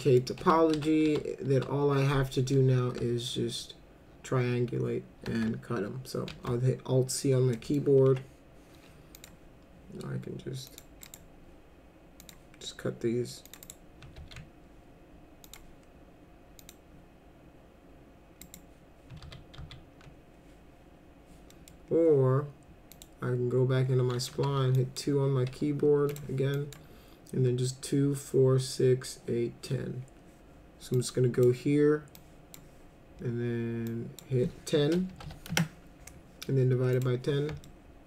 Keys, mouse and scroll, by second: 0.4 F4, 0.7 F4, 1.0 F4, 1.6 F4, 6.3 alt+c, 7.5 middle click, 8.1 F3, 9.2 click, 10.7 click, 11.0 right click, 12.2 click, 13.5 click, 13.6 right click, 14.2 ctrl+z, 15.5 click, 16.6 click, 18.4 right click, 19.2 ctrl+z, 19.6 ctrl+z, 21.5 middle click, 22.9 click, 24.3 w, 24.7 drag, 26.1 click, 26.6 click, 30.9 click, 32.1 click, 33.9 click, 34.8-35.7 typing, 36.9 click, 37.6 alt+middle click.